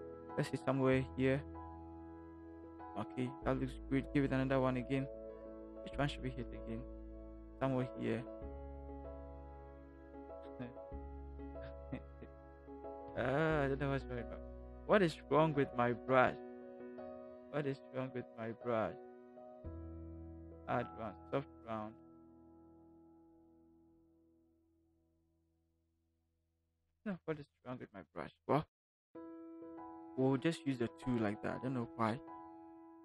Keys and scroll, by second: 13.0 ctrl+alt+Delete, 27.8 ctrl+alt+z.